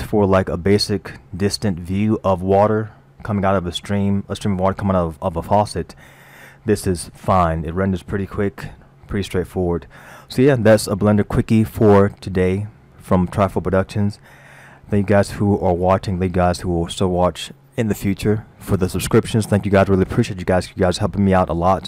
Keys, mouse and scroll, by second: 3.2-3.9 scroll down 2, 6.0-7.6 scroll down 3, 8.8-9.8 scroll down 1, 9.8-10.6 scroll down 1, 14.1-15.9 scroll up 4.